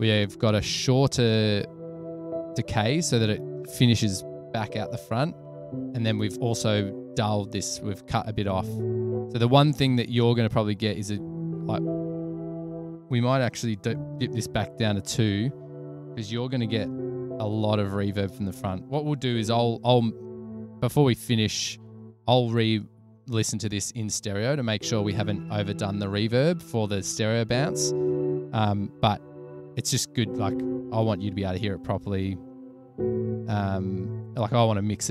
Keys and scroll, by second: 16.2 super+a, 16.5 -, 19.0-19.9 typing.